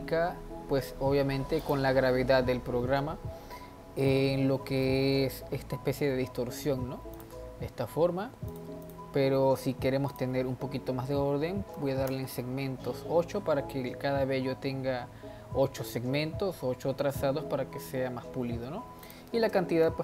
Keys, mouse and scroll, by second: 1.7 click, 4.1-5.2 middle drag, 5.2-7.1 scroll up 1, 7.1 click, 7.5-8.5 scroll down 1, 8.5 click, 8.9 click, 10.1-13.1 drag, 16.3-18.2 scroll up 1, 18.2-18.7 scroll up 1, 19.1-20.0 drag.